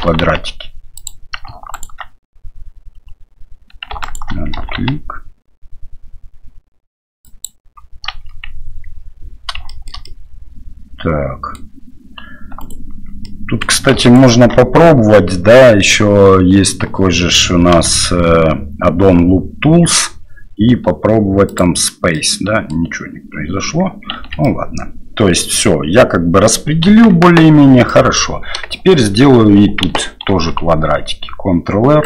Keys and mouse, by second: 0.0 g, 1.7 alt+right click, 4.0 alt+right click, 4.5 g, 9.8 shift+middle click, 10.0-11.6 middle drag, 12.6 alt+right click, 13.2 middle click, 14.0 ctrl+alt+right click, 17.7 w, 22.2 middle click, 24.1 shift+z, 24.6-26.5 middle drag, 26.9 KP_1, 27.9 middle click, 28.8 shift+middle click, 30.3 ctrl+r.